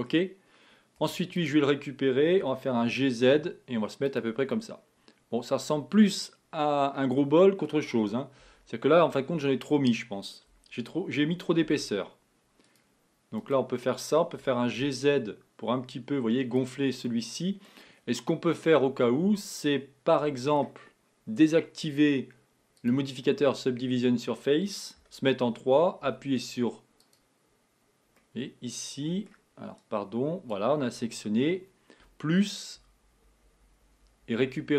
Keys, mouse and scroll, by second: 1.1 Tab, 1.4 click, 2.5 g, 4.5-7.6 middle drag, 8.1-8.5 scroll up 3, 8.5 Tab, 9.1-11.7 middle drag, 11.7 ctrl+r, 14.6 g, 17.1-20.1 middle drag, 20.3-22.8 middle drag, 22.8 click, 25.0 3, 26.3 c, 32.9 ctrl+KP_Add, 33.1 ctrl+KP_Add, 33.3 ctrl+KP_Add, 33.5-34.0 ctrl+KP_Add, 34.2-34.7 ctrl+KP_Add.